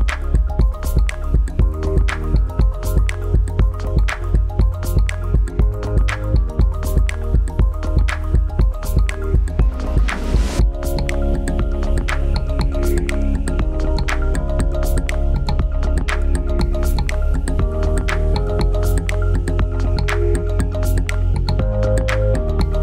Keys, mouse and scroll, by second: 9.2 click.